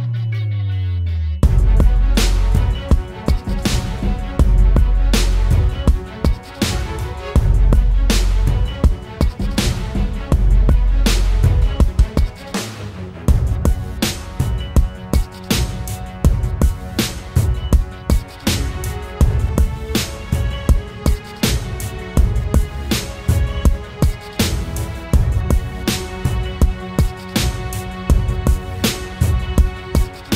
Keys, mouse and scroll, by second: 18.5-21.5 scroll up 1.